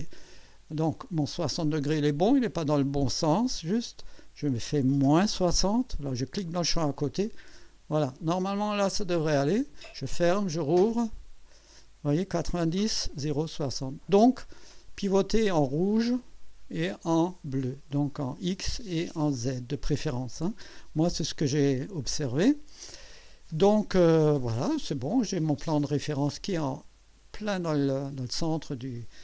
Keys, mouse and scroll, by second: 4.0 click, 5.1 -, 6.4 click, 7.2 click, 9.2 click, 11.0 click, 16.2-19.7 drag, 24.8 click, 25.5 click, 28.2-29.1 drag.